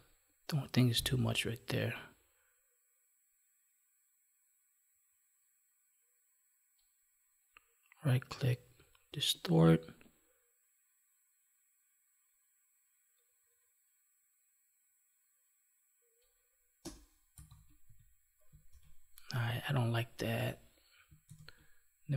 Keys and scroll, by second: 18.7 ctrl+s, 21.2 ctrl+s.